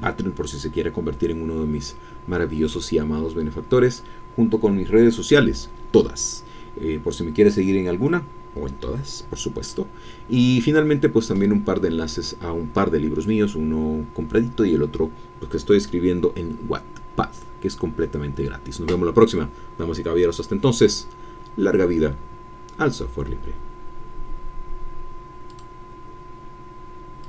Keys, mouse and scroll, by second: 25.5 click, 27.2 click.